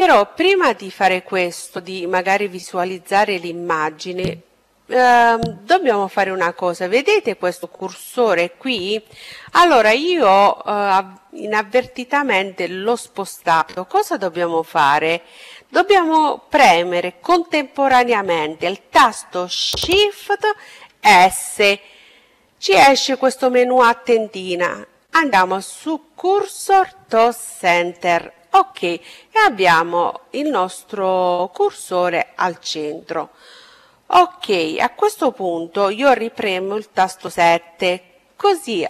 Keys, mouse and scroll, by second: 7.6-13.4 drag, 19.4 shift+s, 35.5 KP_7.